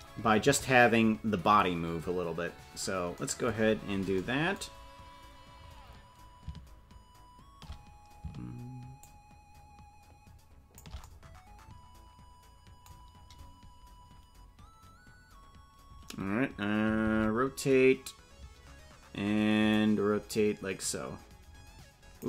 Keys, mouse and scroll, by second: 3.5-4.2 scroll down 10, 4.7-5.2 scroll up 3, 5.3-5.8 scroll down 2, 8.9-10.8 shift+drag, 19.6 alt+r, 19.6-22.2 drag.